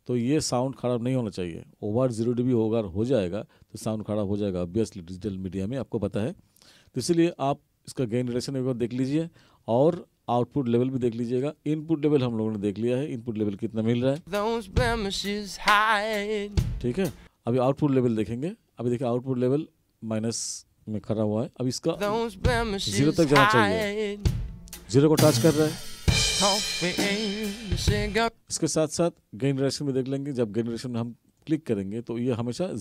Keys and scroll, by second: 14.2 space, 21.9 space, 28.3 space.